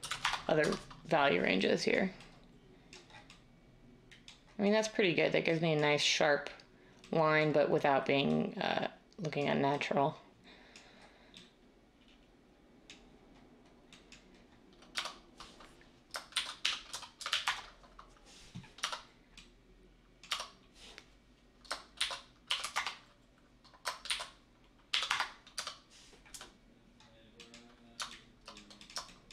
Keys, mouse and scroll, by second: 0.0-0.1 typing, 0.2 Return, 0.6 Tab, 14.9 Tab, 16.3-17.1 typing, 17.4 Return, 18.8 Tab, 18.9 typing, 20.3 Tab, 21.9-25.5 typing.